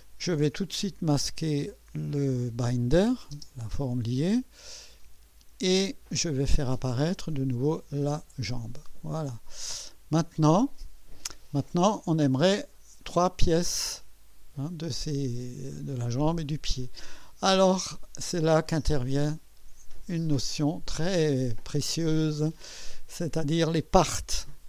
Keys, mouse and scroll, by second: 0.8 click, 3.3 space, 7.6 click, 8.0 space, 9.2 click, 9.9-11.3 drag, 11.7 scroll up 1, 18.6 click, 20.0 click.